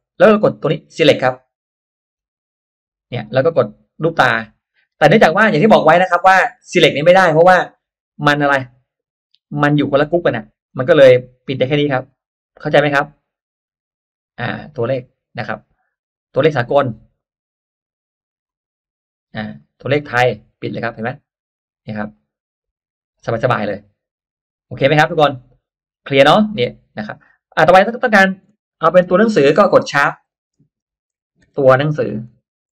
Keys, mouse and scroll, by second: 2.1 click, 3.9 click, 4.6 click, 6.0 click, 6.5 click, 8.1 click, 10.0 click, 10.6 click, 11.4 click, 12.0 click, 13.1 click, 13.8 click, 15.4 click, 15.9 click, 17.1 click, 18.4 click, 19.5 click, 20.9 click, 22.1 click, 25.1-26.1 middle drag, 26.1 scroll up 1, 26.2 middle click, 27.9 click, 29.0 BackSpace, 30.5-32.7 typing.